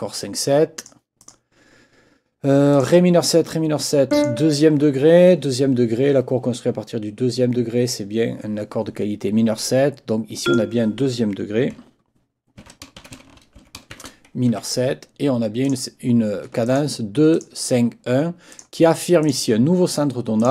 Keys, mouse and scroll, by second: 1.2 click, 2.7 click, 4.1 click, 10.4 click, 12.6 ctrl+t, 13.6 ctrl+shift+m, 14.5 shift+Escape, 15.6 click, 16.6 ctrl+click, 17.3 ctrl+click, 18.5 click, 19.2 click, 20.4 click.